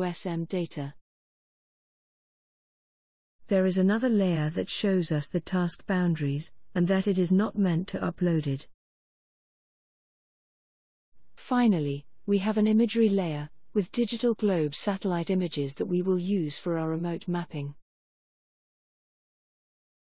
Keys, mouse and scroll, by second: 5.7 click, 13.5 click.